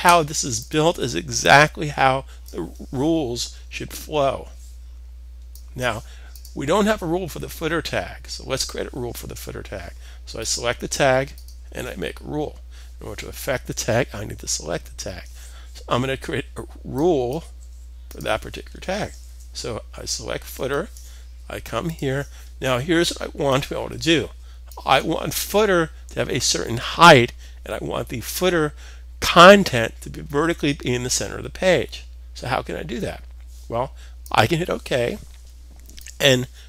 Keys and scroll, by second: 18.8 super+s.